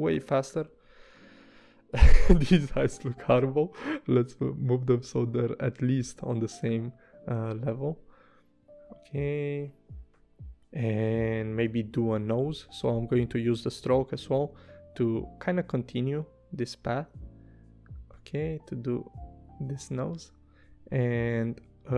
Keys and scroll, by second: 0.5 v, 13.8 p, 19.9 v, 21.2 o.